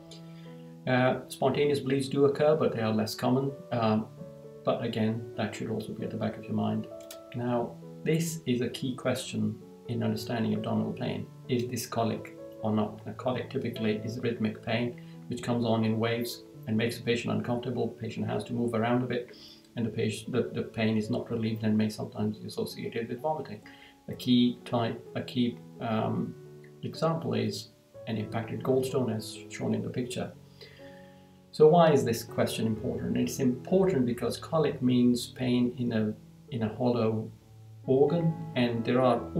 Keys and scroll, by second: 0.0 Down, 6.3 Down, 29.6 Down.